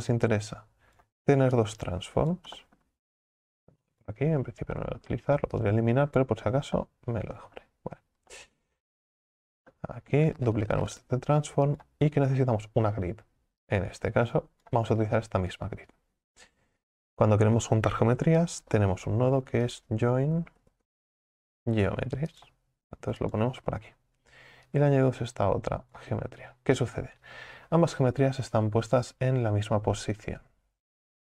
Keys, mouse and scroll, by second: 10.6 shift+d, 14.7 click, 26.0 click.